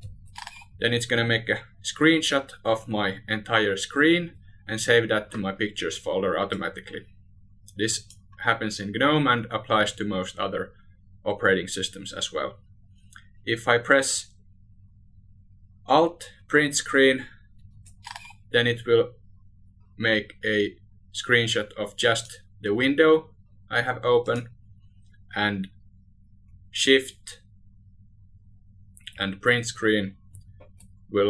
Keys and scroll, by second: 15.8 alt+u, 28.4 shift+Print.